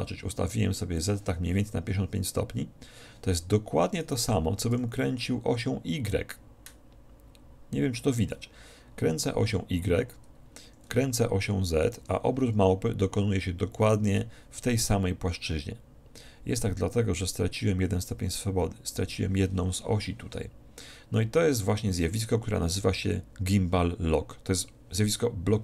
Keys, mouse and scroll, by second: 1.1-2.7 drag, 4.0-5.8 right drag, 4.8 r, 5.8 click, 11.9-13.5 right drag, 12.1 r.